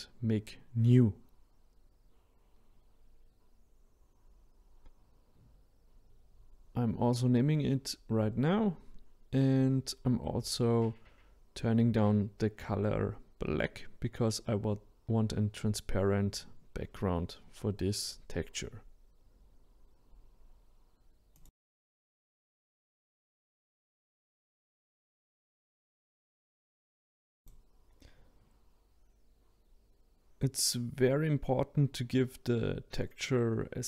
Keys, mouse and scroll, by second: 3.8-7.0 drag, 8.3 BackSpace, 27.3 click, 30.2 middle click, 30.5-30.9 scroll down 1, 30.9-31.4 drag, 32.1 click, 32.6-33.6 drag.